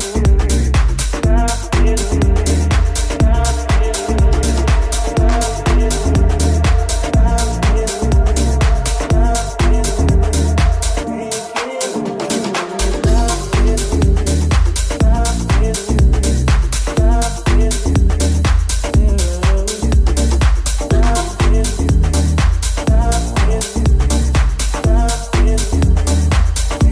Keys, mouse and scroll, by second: 14.5 g, 18.1 right click, 18.3 Tab, 19.0 right click, 19.9 g, 22.2 Tab, 22.6 right click, 22.7-24.1 middle drag, 23.0 shift+Tab, 23.8 alt+z, 24.1 right click, 24.1-26.9 alt+middle drag, 24.3 alt+z, 24.5 g.